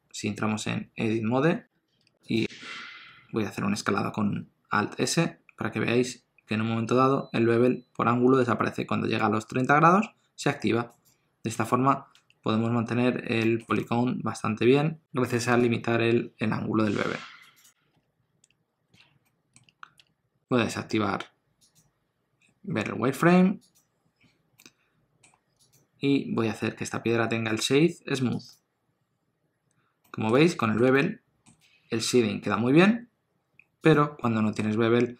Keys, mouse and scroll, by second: 2.0 2, 2.2 click, 5.1 alt+s, 11.5 Tab, 12.1 Tab, 12.7-13.3 scroll up 2, 13.4 shift+middle click, 13.8 ctrl+middle click, 13.9 scroll up 1, 15.6 shift+click, 17.8 scroll down 1, 17.9 1, 18.4 Tab, 18.7 scroll down 1, 18.9 alt+a, 19.2 middle click, 19.6 Tab, 19.7 scroll down 1, 19.9 Tab, 21.6 click, 24.5 middle click, 25.5 click, 27.5 right click, 30.0 middle click, 30.4 alt+a, 30.5 middle click, 30.9 ctrl+middle click, 33.8 click, 34.2 middle click.